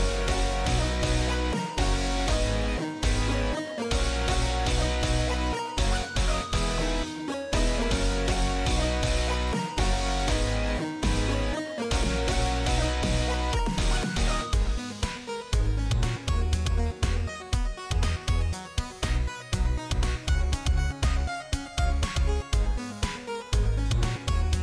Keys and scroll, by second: 4.8 q, 5.7 Escape, 8.8-9.6 typing, 9.7 Return, 11.6-13.7 typing, 14.1 Return, 21.5-22.8 typing.